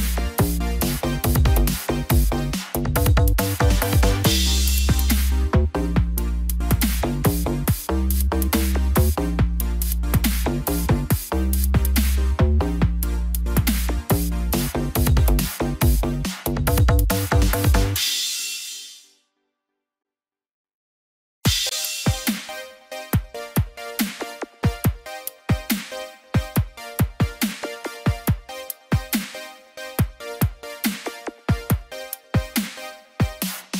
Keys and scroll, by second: 12.0 ctrl+z.